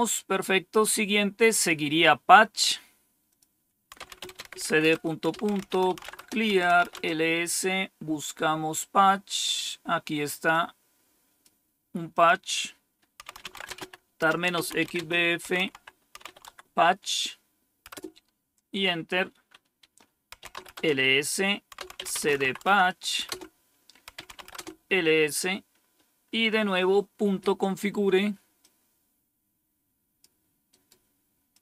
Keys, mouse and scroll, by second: 1.3 click, 3.1 click, 3.6-7.1 typing, 10.4 click, 12.0 click, 12.7 click, 12.9-16.1 typing, 16.3 Tab, 17.8 Return, 20.0-24.9 typing, 28.5-30.1 drag, 30.5 right click, 31.4 click.